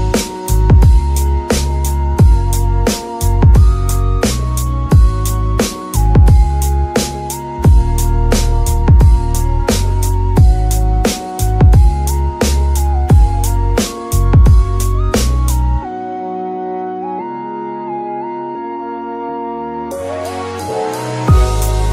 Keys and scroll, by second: 5.3 ctrl+c, 7.9 Return, 8.5 z, 11.9 Escape, 14.2 KP_0, 14.3 Return, 14.9 z, 17.3 Escape, 20.2 KP_1, 20.3 Return.